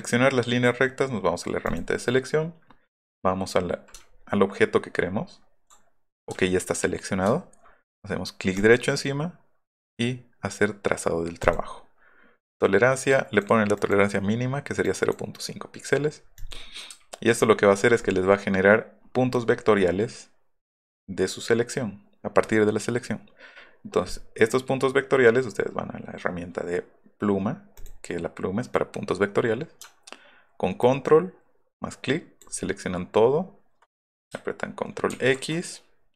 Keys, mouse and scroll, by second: 1.7 click, 4.0 alt+middle click, 4.2 alt+middle click, 5.0 alt+middle click, 5.3 alt+middle click, 6.3 alt+scroll up 2, 7.4 alt+scroll up 2, 8.5 right click, 11.4 click, 13.1 click, 13.8 click, 14.8 click, 17.0 alt+middle click, 17.0-17.6 alt+scroll down 3, 17.6-18.4 alt+scroll up 3, 19.0 alt+middle click, 19.0-19.9 alt+scroll down 8, 19.3 alt+middle click, 19.6 alt+middle click, 19.8 alt+middle click, 27.8 click, 30.8-32.4 ctrl+drag, 35.1 ctrl+x.